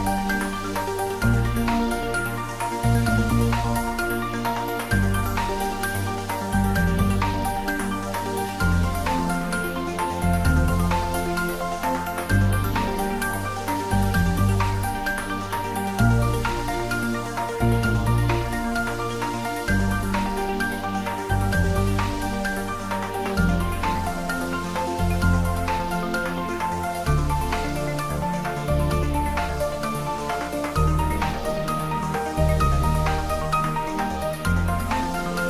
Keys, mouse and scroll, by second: 19.2-19.7 scroll down 1, 19.7-21.2 middle drag, 21.2 click, 22.9-24.8 typing, 24.7 click, 25.9 r, 27.6 click, 28.8 g, 30.1 click, 30.5-32.0 typing, 33.8 click, 34.5 g, 34.9 z.